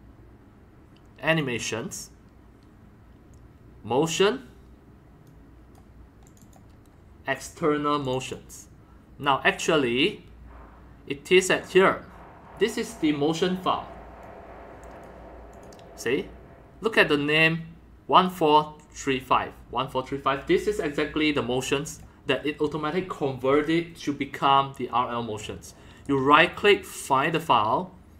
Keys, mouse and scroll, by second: 1.3 click, 1.6-4.0 drag, 5.3 click, 6.2 click, 6.4 click, 8.0 click, 8.2 click, 9.3 scroll down 1, 11.6 click, 14.2-15.0 drag, 15.5 click, 19.3 middle drag, 21.9 click, 22.0-26.1 drag, 26.0 right click, 26.1-26.8 right drag, 27.2-28.1 drag.